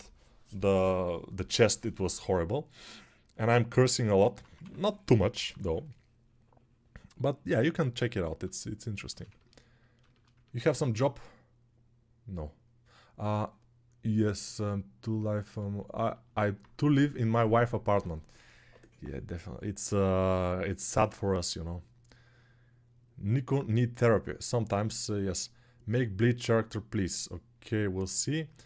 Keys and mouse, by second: 4.4 3, 4.8 [, 5.0 [, 5.2 [.